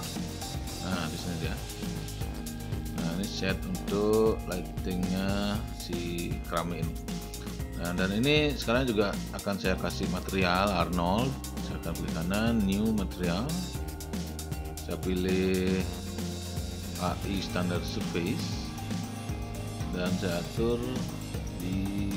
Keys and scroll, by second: 0.1 shift+h.